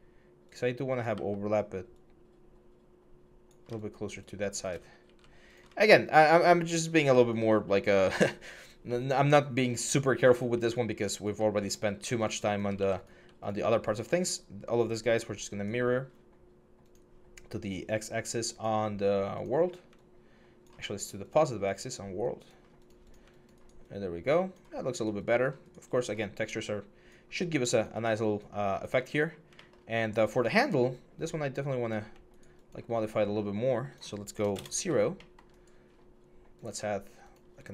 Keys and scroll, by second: 0.9 w, 34.2 0, 34.3 Return, 37.3 6.